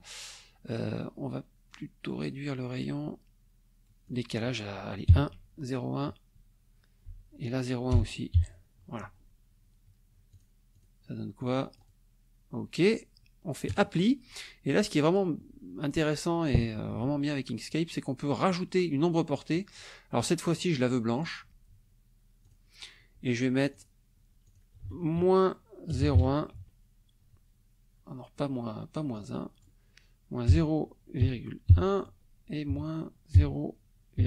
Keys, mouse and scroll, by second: 0.7 click, 4.1 click, 5.1 KP_1, 5.3 Tab, 7.0 Right, 7.9 BackSpace, 8.3 KP_1, 9.0 Tab, 10.3 click, 10.7 click, 11.4 click, 11.8 click, 13.7 click, 14.7 click, 19.5 click, 20.5 click, 22.4 click, 23.7 click, 24.4 click, 24.8 ctrl+a, 25.2 ctrl+KP_Subtract, 25.9 KP_0, 26.0 KP_Decimal, 26.1 KP_1, 26.5 Tab, 29.1 click, 30.5-34.2 typing, 32.0 Tab.